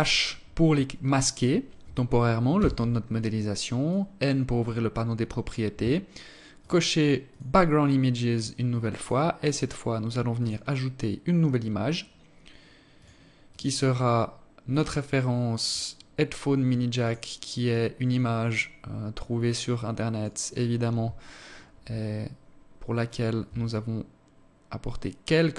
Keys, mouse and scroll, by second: 1.7 n, 3.0 click, 5.8 click, 6.4 click, 6.9-7.4 scroll down 1, 7.4-8.0 scroll down 2, 8.0 scroll down 1, 8.1 click, 9.6 click, 11.0-11.4 scroll down 2, 12.1 click, 12.6 click, 16.2 click, 18.7 click, 21.0-22.7 scroll up 3, 22.7 shift+click.